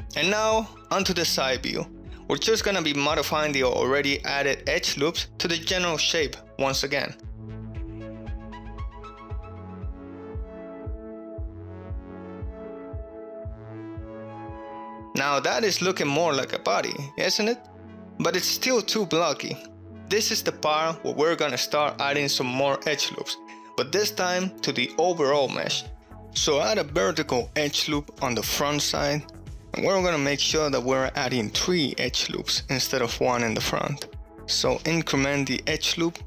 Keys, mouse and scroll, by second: 0.5 ctrl+middle click, 1.7 KP_3, 2.1 alt+z, 2.5 shift+middle drag, 2.6 ctrl+middle click, 2.9 1, 3.1 click, 3.9 ctrl+middle click, 4.3 g, 4.3 x, 5.0 right click, 5.2 g, 6.0 y, 6.4 click, 7.2-10.1 typing, 7.7 click, 8.3 click, 8.9 click, 9.6 click, 9.9 click, 10.4 shift+middle click, 10.6 click, 11.2 click, 11.5-13.6 typing, 12.3 click, 12.8 click, 13.4 click, 14.2 alt+z, 14.2 ctrl+middle click, 14.2 click, 14.5 shift+middle click, 15.7-17.3 shift+middle drag, 20.3 click, 22.3 ctrl+middle click, 28.1 shift+middle click, 29.4 ctrl+r.